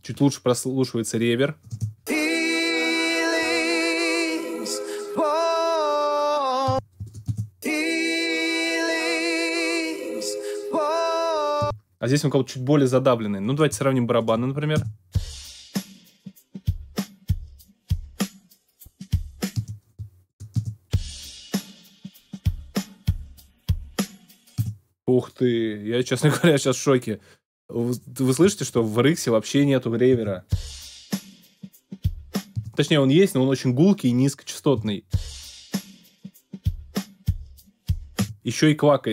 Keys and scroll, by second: 1.7 space, 6.6 space, 8.2 space, 11.6 space, 14.7 alt+space, 15.4 space, 19.6 space, 21.5 space, 24.5 space, 30.1 space, 32.5 space, 34.7 space, 38.1 space.